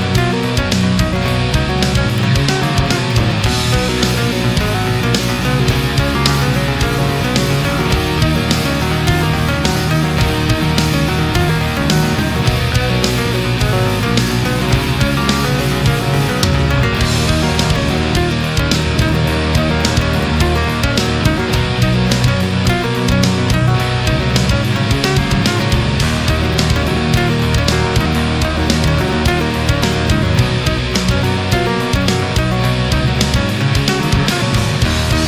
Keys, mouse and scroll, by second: 0.2-2.1 middle drag, 2.6 right click, 3.4-5.9 drag, 5.9-7.0 middle drag, 7.2-9.0 middle drag, 9.3 scroll down 2, 9.7-10.2 middle drag, 10.6 shift+right click, 11.2 shift+right click, 11.8-14.6 shift+drag, 14.7-15.1 scroll down 1, 15.5 middle click, 16.3 a, 16.6-21.9 middle drag, 22.0-22.6 middle drag, 24.2 click, 24.6 space, 25.3 click, 26.5 click, 27.4 click, 28.2 Return, 29.1 a, 29.6 middle click, 30.3 a, 30.5-32.0 middle drag, 33.0 click, 34.2 click.